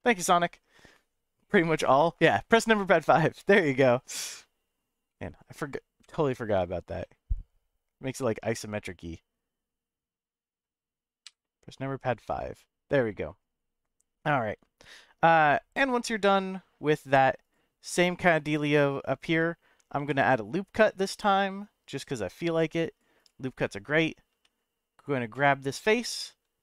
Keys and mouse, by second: 5.1 middle click, 6.0 KP_5, 7.0-10.6 middle drag, 11.2 KP_5, 12.0-13.7 middle drag, 14.8-16.0 middle drag, 16.2 middle click, 17.4 click, 18.7 shift+middle click, 19.9 ctrl+r, 23.2-24.3 drag, 24.3 3, 25.9 e.